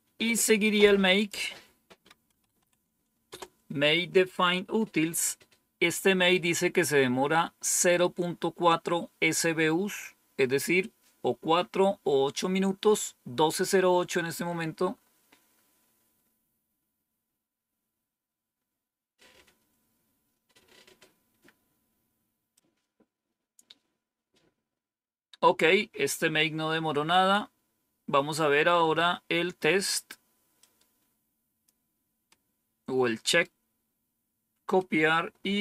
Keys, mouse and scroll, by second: 1.1 click, 1.8-3.0 typing, 3.2 Return, 22.5 click, 27.9-28.6 scroll down 1, 28.6 scroll down 1, 30.5-31.6 drag, 32.2-33.4 right drag, 34.7-35.6 right drag.